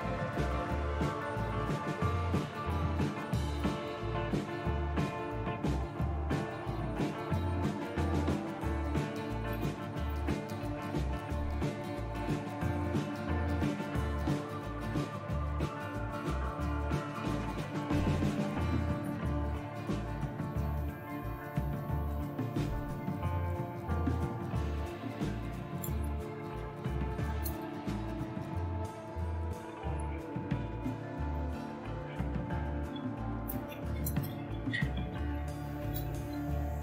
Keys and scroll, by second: 0.0-0.6 typing, 3.5 Return, 9.5 Return, 22.3 Up, 25.5-35.8 typing, 36.5 Return.